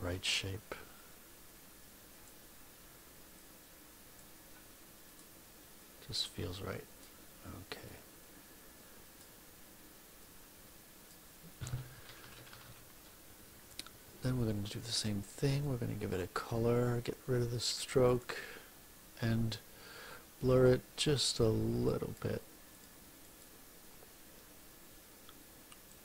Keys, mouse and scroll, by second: 0.9-2.4 drag, 3.3 click, 5.0 click, 5.7-7.1 drag, 7.8-9.3 drag, 10.1 click, 12.0 -, 15.4 click, 17.4 click, 18.0 click, 20.4 click, 21.0 click, 21.8 click, 22.6 click, 23.2 click, 25.8 click.